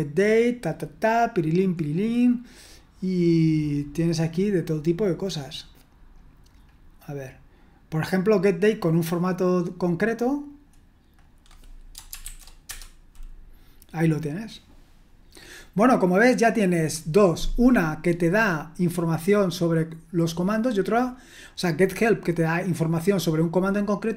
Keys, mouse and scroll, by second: 0.6-1.6 scroll down 1, 1.6-2.6 scroll down 1, 3.3-5.3 scroll down 2, 5.3-6.1 scroll down 1, 6.6-7.0 scroll down 2, 8.4-9.5 drag, 10.5 click, 11.2 click, 12.2 ctrl+v, 12.7 Return.